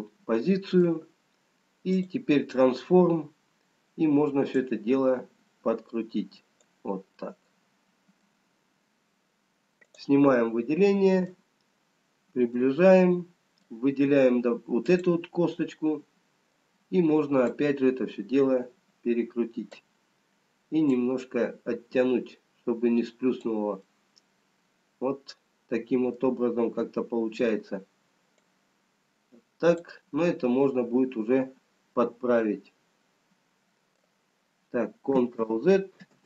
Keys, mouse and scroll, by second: 3.9 click, 4.6 click, 7.7 middle click, 10.2 click, 10.6 middle click, 11.8 scroll up 4, 13.1 middle click, 15.6 click, 15.6 middle click, 20.0 click, 24.5 middle click, 27.1-28.5 scroll down 1, 28.5 click, 32.0 middle click, 34.6 scroll down 1.